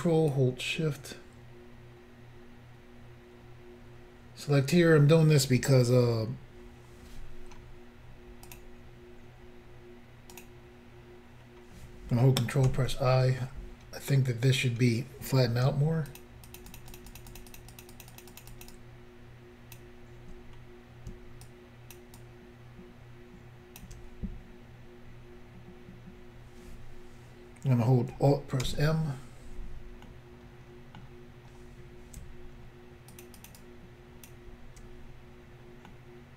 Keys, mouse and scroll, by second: 8.5 click, 10.3 click, 10.4 click, 12.7 ctrl+i, 16.1 shift+click, 16.2 shift+click, 16.5 shift+click, 16.6 shift+double click, 16.7 shift+click, 16.8 shift+click, 16.9 shift+click, 17.0 shift+double click, 17.1 shift+click, 17.2 shift+click, 17.3 shift+click, 17.4 shift+double click, 17.5 shift+click, 17.6 shift+click, 17.7 shift+click, 17.8 shift+double click, 17.9 shift+click, 18.1 shift+click, 18.1 shift+click, 18.2 shift+double click, 18.3 shift+click, 18.4 shift+click, 18.5 shift+click, 18.7 shift+double click, 18.7 shift+click, 21.5 shift+click, 22.2 shift+click, 28.7 alt+m, 31.0 middle click, 33.1 shift+click, 33.2 shift+click, 33.4 shift+click, 33.5 shift+double click, 33.6 shift+click, 35.9 middle click.